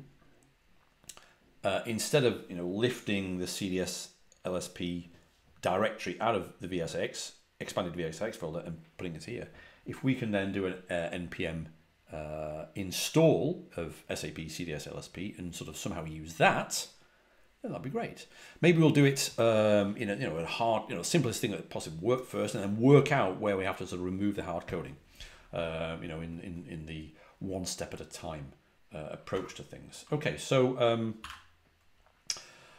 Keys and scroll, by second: 29.0-29.7 typing, 30.9-31.7 typing.